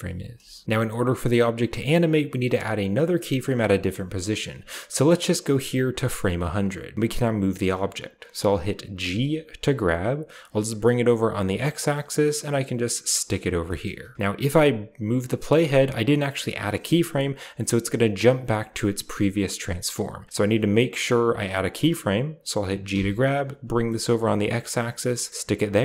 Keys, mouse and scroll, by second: 0.6-2.0 drag, 2.6-3.5 drag, 4.4-5.4 drag, 8.9 g, 10.6-12.0 middle drag, 13.1 click, 13.4-13.8 scroll down 2, 13.5 shift+middle drag, 13.8-15.4 shift+drag, 17.2-17.7 drag, 18.4-18.9 drag, 20.0-21.3 drag, 22.7 g, 23.9-25.3 middle drag, 25.4 click.